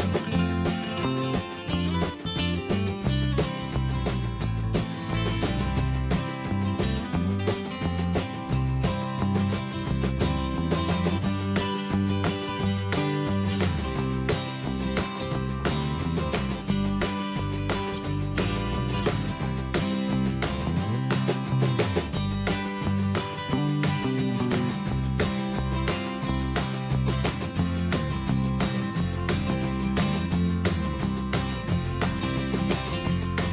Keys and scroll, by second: 9.5 ctrl+d, 12.5 ctrl+t, 14.9 Return, 23.9 ctrl+z.